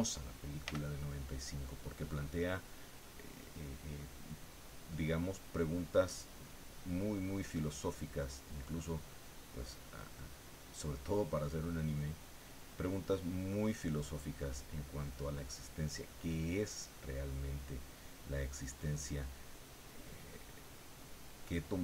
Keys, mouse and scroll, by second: 0.6 f, 1.4 click, 2.0-3.5 middle drag, 4.2-7.0 drag, 7.7 click, 9.6-10.7 drag, 11.2 click, 13.5-15.3 drag, 15.5-17.1 middle drag, 17.1 scroll up 1, 17.2 middle click, 17.9-18.3 scroll up 1, 18.3 middle click, 19.3 scroll up 1, 19.8-21.3 drag, 21.4-21.8 middle drag.